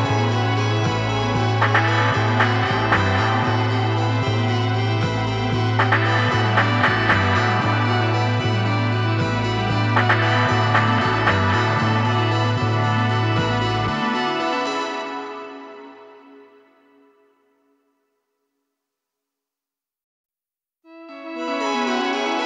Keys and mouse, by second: 1.4 ctrl+KP_3, 7.0 g, 15.1 click, 16.2 g, 18.8 click, 19.3 click, 20.1 click.